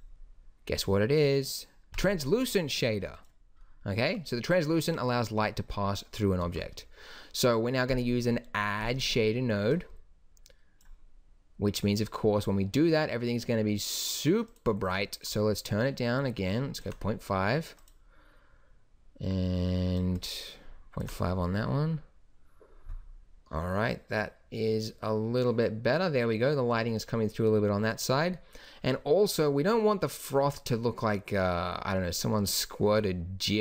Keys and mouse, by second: 6.4 shift+a.